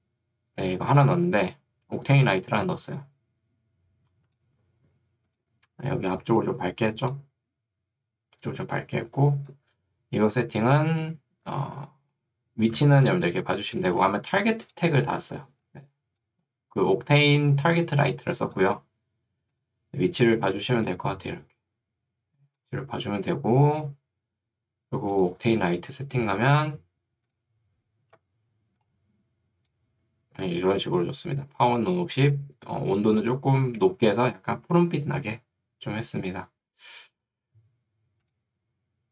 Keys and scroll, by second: 6.2 ctrl+2, 8.2 Escape, 12.8 ctrl+2, 14.0 Escape, 15.4 ctrl+2, 18.8 Escape, 20.6 ctrl+2, 23.8 Escape, 26.4 ctrl+2, 28.2 Escape, 30.4 ctrl+2, 35.2 Escape.